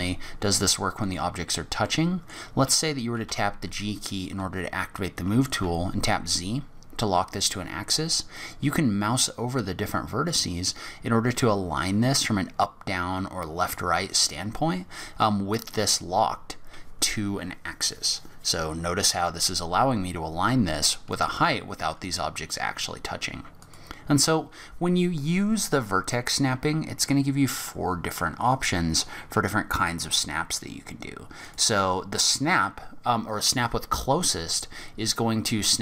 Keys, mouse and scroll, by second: 1.8 middle click, 3.3 g, 23.6 click.